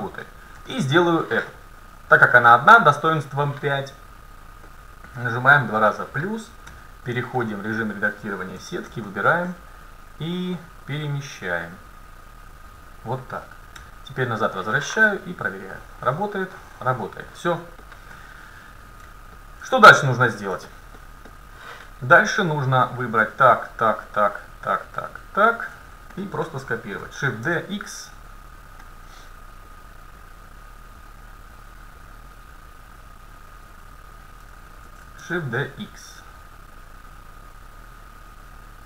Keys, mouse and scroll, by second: 0.3-1.9 middle drag, 1.9-3.7 right drag, 4.7-7.5 drag, 6.7 Tab, 7.5 Tab, 8.7 a, 9.1-10.4 middle drag, 10.4-12.3 drag, 13.8 Tab, 15.7-17.6 drag, 17.6 middle click, 18.2 a, 19.8 middle click, 22.7-27.4 right drag, 27.0 shift+d, 28.5-31.5 drag, 32.3-34.1 drag, 34.9 shift+d.